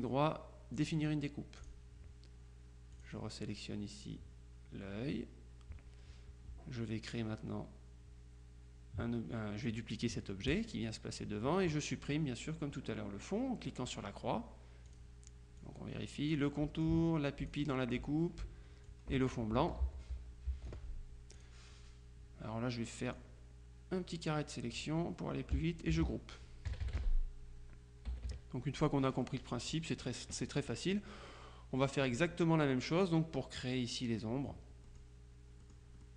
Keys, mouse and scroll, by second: 0.8 click, 1.7 click, 3.0 click, 10.7 click, 14.0 click, 15.0 click, 15.7-16.9 drag, 18.9 click, 19.9 ctrl+z, 21.4 click, 23.2-25.3 drag, 26.0 ctrl+g, 26.7 KP_Subtract, 28.2 KP_Subtract, 29.3 click, 34.9 click, 35.7 middle click.